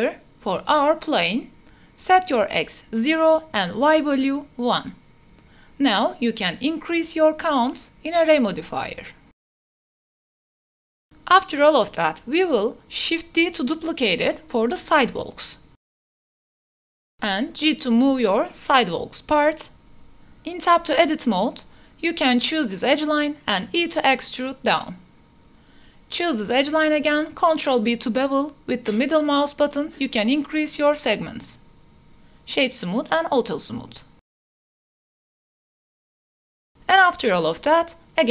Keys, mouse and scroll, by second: 0.1-1.0 drag, 2.2 click, 4.2-5.5 drag, 6.6 shift+middle click, 7.8 click, 8.3 click, 8.8 click, 9.5 click, 9.6 click, 9.8 click, 10.7-11.2 middle drag, 11.5 shift+middle drag, 12.2 middle click, 12.8 shift+middle drag, 13.5 shift+d, 13.9 x, 18.1 g, 18.4 z, 20.1 KP_0, 21.6 Tab, 22.6 2, 23.1 click, 23.6 e, 24.0 z, 26.8 ctrl+b, 31.4 Tab, 32.1-32.7 drag, 33.4 click, 34.2 drag, 35.1 click, 38.0 shift+d.